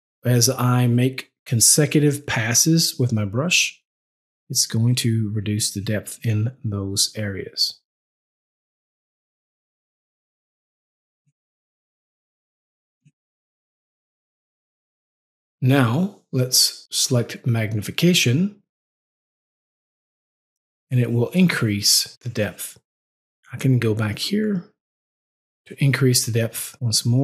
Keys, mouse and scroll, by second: 5.7 double click, 6.1 click, 6.5 double click, 6.9 click, 7.3 click, 8.4 double click, 8.6 click, 9.0 click, 9.3 double click, 9.5 click, 9.9 click, 10.3 double click, 10.5 click, 10.8 click, 11.1 double click, 11.3 click, 12.4 click, 12.9 double click, 13.2 click, 13.6 click, 14.6 double click, 14.9 click, 16.8 click, 18.7 click, 24.0 click, 26.5 double click, 26.7 click.